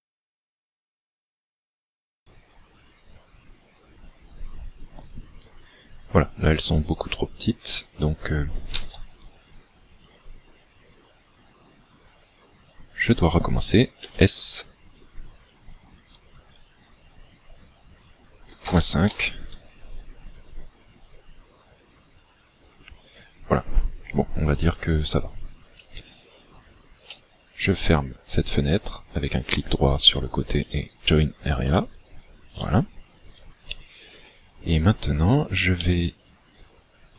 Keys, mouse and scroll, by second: 14.1 s, 27.0 right click, 35.8 middle click.